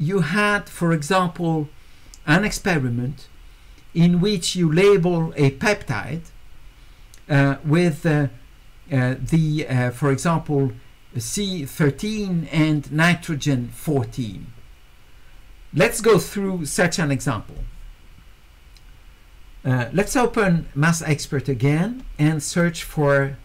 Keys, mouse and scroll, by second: 20.9 click, 22.5 click.